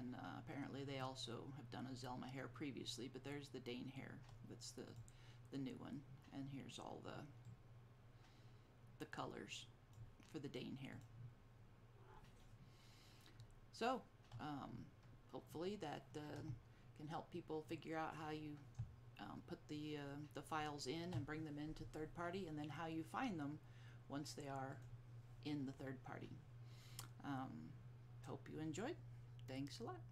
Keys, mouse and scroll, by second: 5.0 click, 7.6 click, 11.1 click, 24.9 click, 26.7 click.